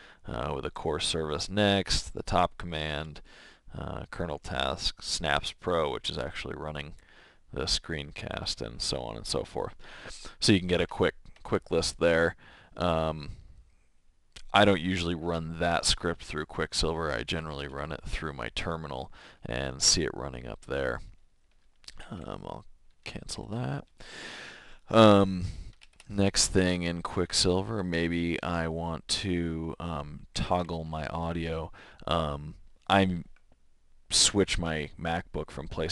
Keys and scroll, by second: 10.9 Escape, 11.3 Escape, 17.5 shift+[, 22.0 alt+c, 23.4 alt+[, 30.1-31.5 typing.